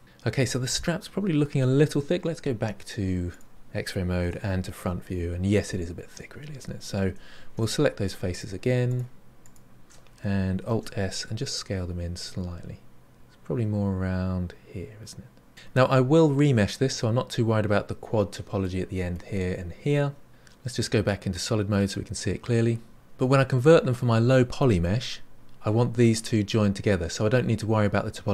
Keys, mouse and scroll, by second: 3.3 click, 4.2 KP_1, 4.9 scroll up 6, 7.0 3, 7.5 alt+click, 8.3 alt+shift+click, 8.8 alt+shift+click, 9.4 alt+shift+click, 10.7 alt+s, 15.5-18.5 middle drag, 18.6-20.3 middle drag, 21.3-22.9 drag.